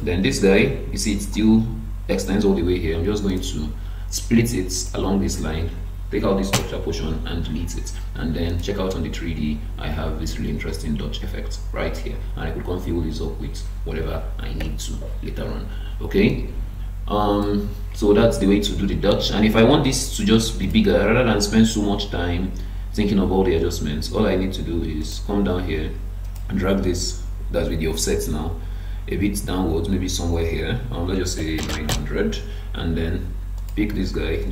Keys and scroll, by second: 6.5 BackSpace, 31.9 Return.